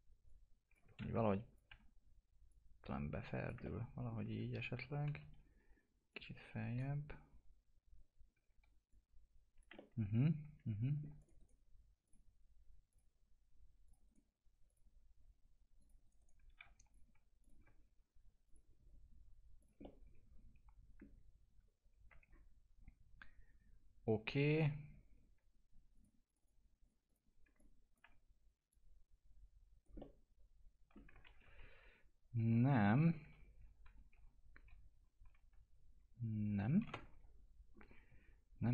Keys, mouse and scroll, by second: 1.0 ctrl+z, 1.2 click, 1.6 e, 2.4 click, 3.9 alt+middle click, 4.3 w, 6.1-8.3 drag, 8.3 w, 8.8 click, 10.0-11.1 alt+middle drag, 11.1 click, 11.3 right click, 12.0 click, 14.0 right click, 14.6 click, 16.0 right click, 16.6 2, 16.9 click, 19.8-21.5 alt+middle drag, 21.5 alt+q, 22.2-22.7 scroll down 1, 24.5 click, 27.4 click, 27.6 alt+click, 28.6 click, 29.9 alt+middle click, 31.2 ctrl+z, 37.7-38.7 scroll down 1.